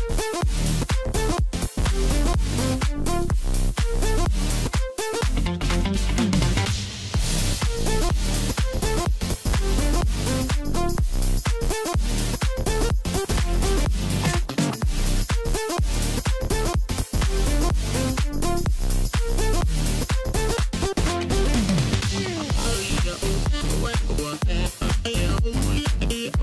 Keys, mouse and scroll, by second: 1.1 click, 1.5-3.4 middle drag, 3.4 e, 6.7 g, 8.6-11.7 middle drag, 13.3 2, 13.5 click, 13.7 click, 15.0 ctrl+b, 17.9-20.9 middle drag, 23.4-23.8 scroll up 1, 24.0 click, 24.8 3, 25.0 click, 26.0 shift+click.